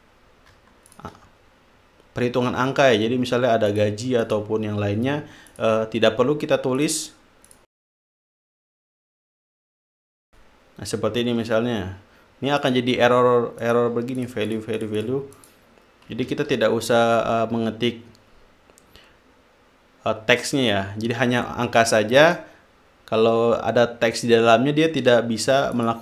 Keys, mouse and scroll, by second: 1.2 shift+click, 4.0 click, 4.6 click, 5.8 click, 7.2 click, 8.7 click, 9.0-10.1 typing, 10.6 click, 13.0 click, 14.0 click, 14.5-15.6 drag, 15.7 click, 16.6 ctrl+z.